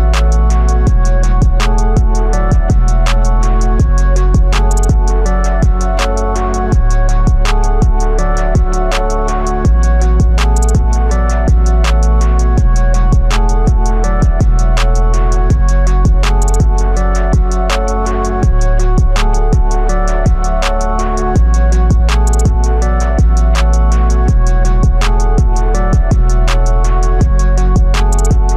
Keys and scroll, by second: 9.5 x, 19.5 x.